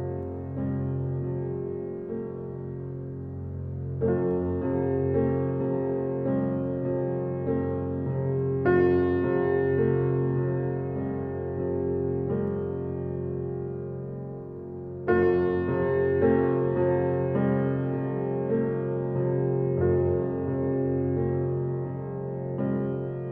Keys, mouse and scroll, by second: 0.7-1.1 scroll down 1, 2.8 click, 3.7 right click, 4.8 click, 7.8-8.6 scroll up 1, 8.7 click, 9.2-10.6 scroll down 1, 10.6 click, 10.9 click, 15.4 0, 15.7 Return, 17.1 click, 17.5-18.7 scroll up 1, 18.7-19.0 scroll up 1, 19.0 ctrl+z, 19.6 ctrl+z, 20.5-20.9 scroll up 1, 20.5 typing, 20.9 scroll down 1, 21.3 ctrl+z.